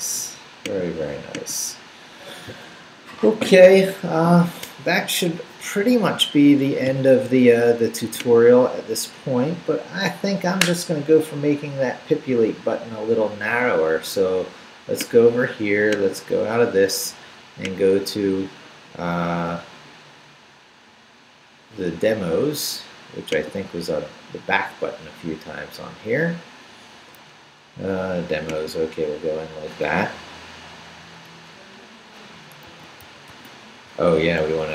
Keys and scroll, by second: 32.7 super+f, 33.0 super+b, 33.3 typing.